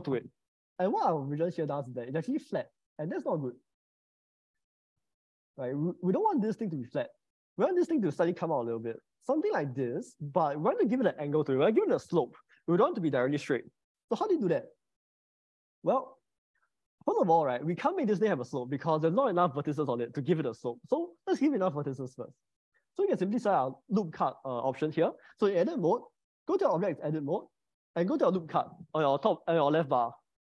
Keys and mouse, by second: 1.2 click, 2.1 click, 3.9 click, 6.3 middle click, 9.0 g, 10.2 middle click, 14.7 ctrl+z, 21.9 click, 26.1 Tab, 26.7 Tab, 27.4 Tab.